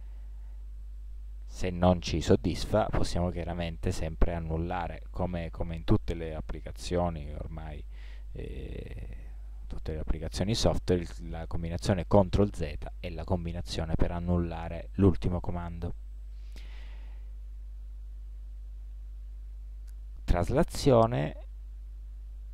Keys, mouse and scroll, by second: 12.5 ctrl+z, 18.6-21.4 middle drag.